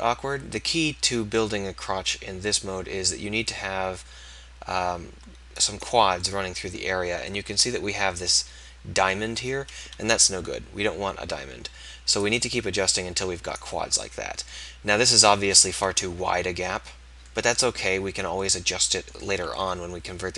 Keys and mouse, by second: 6.3-10.2 right drag, 10.2 KP_1, 13.8 click, 15.8 KP_1, 19.6 KP_1.